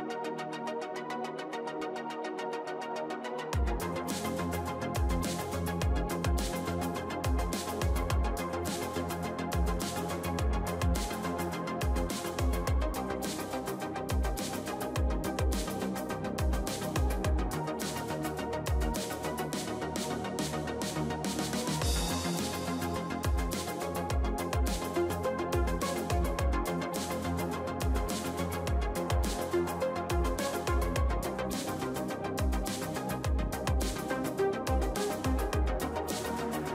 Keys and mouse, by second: 1.0-2.8 right drag, 3.0 a, 3.8 ctrl+z, 4.5 ctrl+l, 5.2 KP_3, 6.1 middle click, 7.2 e, 7.8 s, 10.5-14.1 drag, 11.6 s, 14.2 g, 17.1 ctrl+s, 17.6 middle click, 18.3 a, 18.5 a, 19.3 ctrl+n, 19.6 a, 21.4 ctrl+l, 22.2 KP_3, 23.4-24.9 drag, 25.9-27.0 middle drag, 27.0 ctrl+s, 27.8 KP_1, 30.2 a, 32.2-34.1 right drag, 33.9 ctrl+l, 34.2-35.4 middle drag, 35.7 h, 36.3 KP_3.